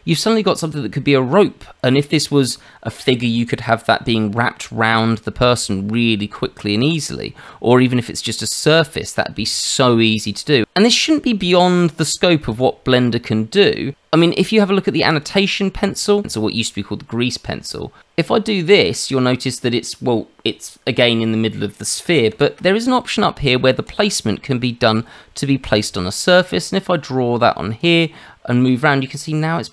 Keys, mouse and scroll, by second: 9.4 shift+middle click, 12.5 click, 13.2 Tab, 13.3 Tab, 15.1 click, 18.0 click, 19.3 middle click, 22.3 ctrl+z, 23.8 click, 26.5 click, 28.1 middle click.